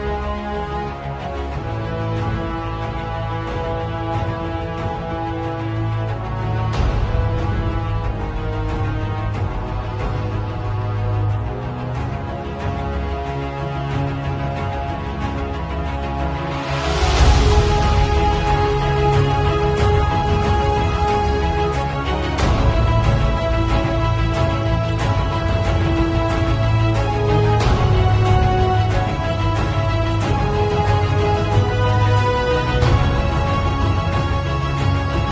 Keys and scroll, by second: 5.8 space, 7.2 b, 11.1 [, 11.6 ], 12.0 [, 12.4 ], 13.4 ], 14.2 v, 18.4 x, 18.6 alt+Delete, 18.8 alt+Delete, 19.5 b, 19.9 x, 22.7-25.0 typing, 27.1 [, 28.7 [, 29.5 ], 34.0 z, 34.9 v, 35.1 space.